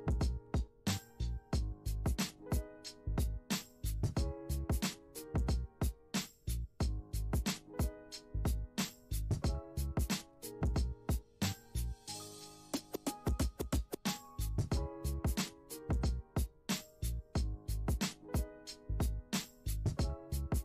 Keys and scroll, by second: 19.7-20.6 typing.